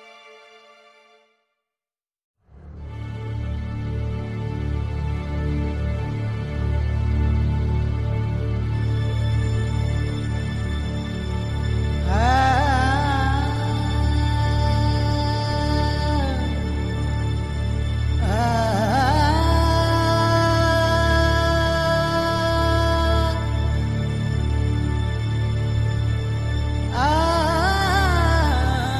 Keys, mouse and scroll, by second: 0.0 s, 0.9 r, 1.8 click, 2.3 click, 3.6-4.7 middle drag, 4.7 s, 5.4 click, 6.4 click, 6.6 x, 8.1 click, 8.6 f, 9.6 ctrl+z, 9.9 e, 10.8 s, 11.7 middle click, 12.1-13.2 middle drag, 13.2 click, 13.5 e, 14.6 middle click, 15.8 Tab, 16.4 ctrl+g, 18.0 middle click, 18.3-19.3 drag, 19.3 ctrl+j, 19.6-20.6 middle drag, 20.4 click, 20.7 KP_3, 21.7 click, 22.4 KP_1, 24.9 click, 25.7 middle click, 26.2 click, 26.4 Tab, 26.8 middle click, 28.6 Tab.